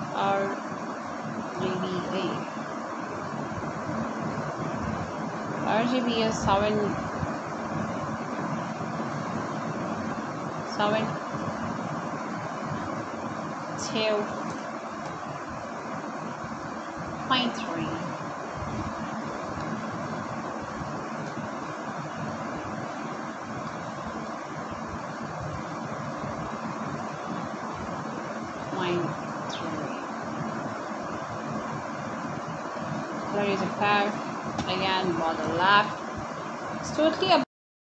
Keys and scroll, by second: 5.7 2, 8.7 BackSpace, 10.3 Right, 11.3 BackSpace, 12.9 ., 13.7 3, 19.0 Return, 19.1-20.4 typing, 21.1 Down, 21.9 Return, 25.1-27.2 typing, 28.6-31.2 typing, 30.1 Return, 32.6 Return.